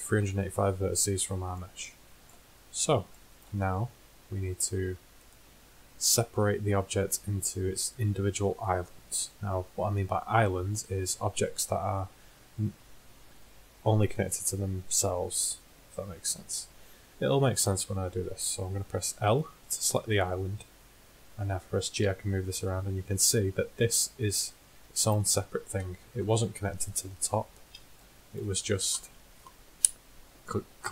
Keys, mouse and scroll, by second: 1.0 middle click, 5.2 middle click, 7.2-10.7 middle drag, 19.3 l, 21.2-22.3 middle drag, 22.3 g, 23.7 middle click, 23.8 middle click, 24.2 middle click, 24.5 middle click, 25.6 middle click, 27.4 z, 30.8 KP_1.